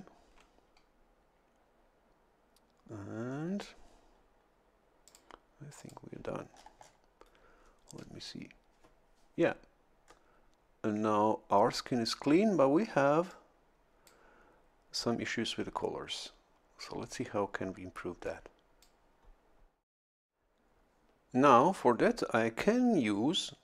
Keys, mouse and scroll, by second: 5.1 click, 5.8 click, 6.4-7.2 scroll down 1, 10.0-10.4 scroll up 1, 13.3-14.5 drag, 18.2 click.